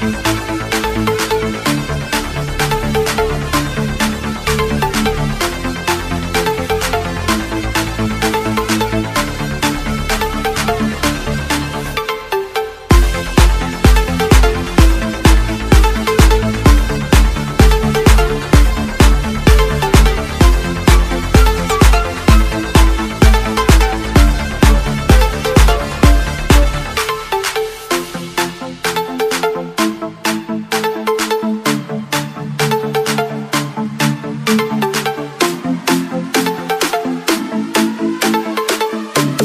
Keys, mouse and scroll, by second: 3.6 s, 5.1 click, 8.1 2, 8.8 click, 11.5 s, 12.3 click, 14.6 2, 15.0 click, 16.2 BackSpace, 16.5 3, 17.6 click, 22.3 click, 24.6 space, 25.8 4, 26.5 click, 30.6 click, 33.7 click, 34.0 click, 35.3 ctrl+c, 35.8 click, 37.9 click.